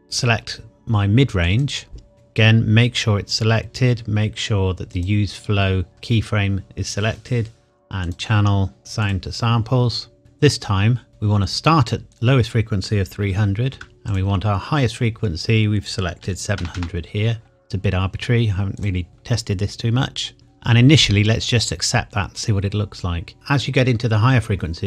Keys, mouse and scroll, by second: 1.4 click, 4.9 click, 5.9-7.5 scroll up 1, 8.0 click, 11.1 click, 13.2 KP_3, 13.6 KP_0, 14.1 click, 16.2 KP_7, 16.5 KP_0, 18.7 click.